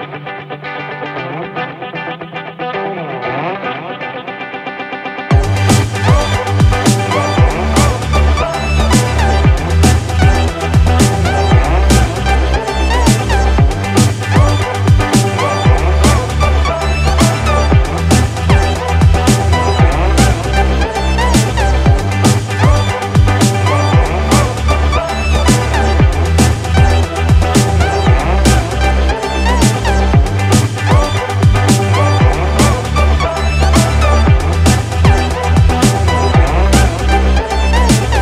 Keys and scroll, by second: 3.3 ctrl+=, 3.5 ctrl+space, 10.3 ctrl+-, 31.7 ctrl+=.